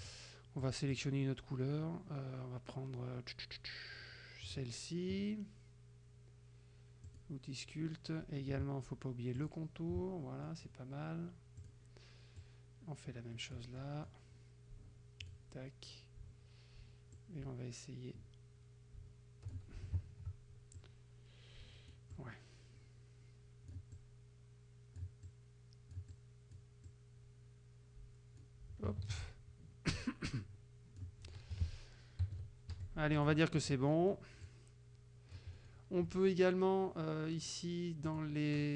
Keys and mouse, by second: 0.1 click, 0.6 click, 1.0 click, 4.5 click, 7.1 click, 9.5 shift+click, 10.6 click, 11.6 click, 15.3 click, 17.2-19.8 drag, 20.8-22.1 drag, 26.9-28.7 drag, 29.1 ctrl+z, 30.0-31.2 drag, 31.6 F1, 32.3 KP_Subtract, 32.8 F1, 33.2 click, 33.6 click, 34.5-35.6 drag, 35.6 middle click, 38.1 click.